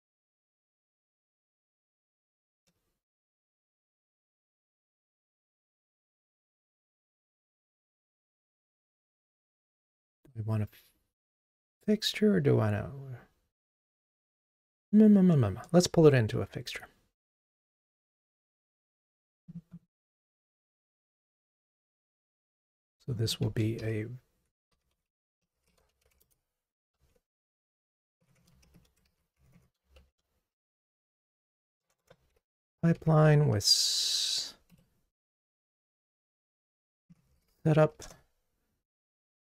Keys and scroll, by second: 20.7 super+c, 21.9 super+v, 33.1 super+n, 36.1 super+j, 38.1 Return.